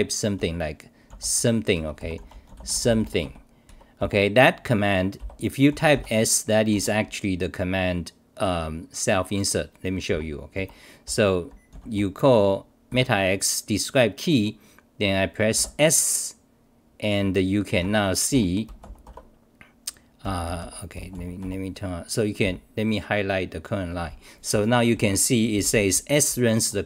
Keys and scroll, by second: 1.7-2.7 typing, 3.7 Home, 4.0 Return, 5.2 c, 5.8 u, 6.7 Home, 10.1 t, 10.5 u, 17.8 Home, 18.3 w, 22.4 t, 24.9 c, 25.6-26.7 r.